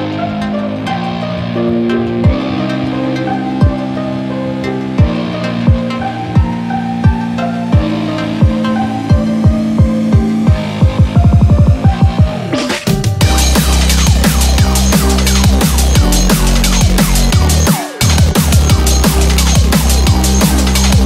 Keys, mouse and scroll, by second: 4.9 click, 4.9 KP_7, 7.7 click, 8.5 click, 8.8 click, 11.5-12.9 scroll up 2, 12.9 middle click, 13.2 click, 13.9 KP_7, 14.6 Tab, 15.6 1, 16.0 scroll up 2, 19.2 1, 20.3 3.